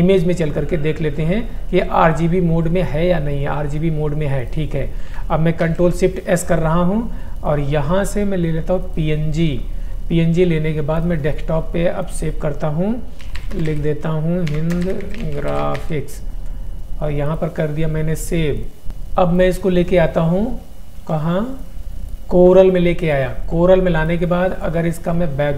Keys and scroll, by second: 13.1-16.5 typing, 21.1 F2.